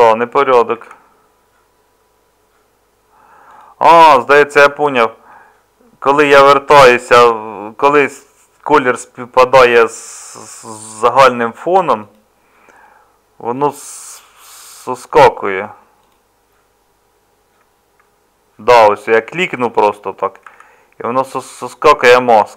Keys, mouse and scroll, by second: 0.7 ctrl+z, 20.5 ctrl+z.